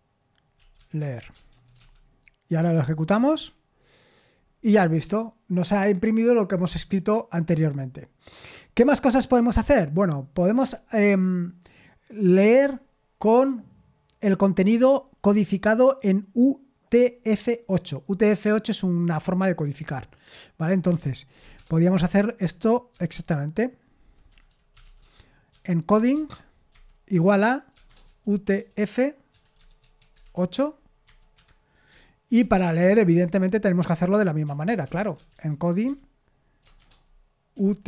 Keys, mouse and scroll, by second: 0.3-2.0 typing, 3.2 F5, 4.7 Escape, 19.7-21.6 typing, 22.9-26.6 typing, 26.7 Tab, 27.8-35.8 typing, 31.0 Tab, 31.3 Escape, 37.3-37.8 typing.